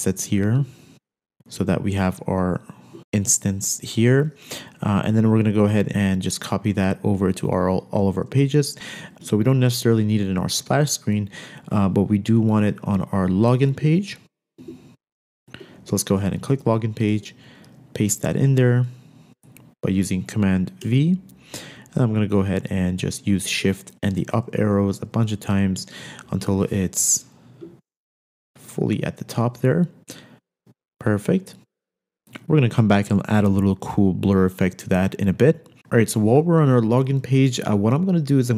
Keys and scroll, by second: 8.3 super+c, 9.3 z, 13.9 Escape, 14.7 Escape, 17.3 super+v, 21.0 shift+Up, 21.1 shift+Up, 25.3 shift+Up, 26.3 shift+Up.